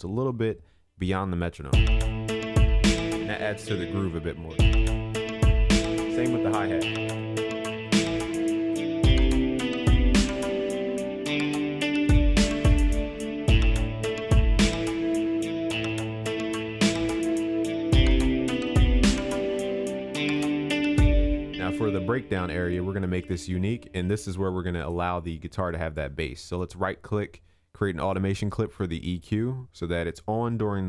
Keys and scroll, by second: 5.0 ctrl+s, 10.9 ctrl+s, 20.7 ctrl+s.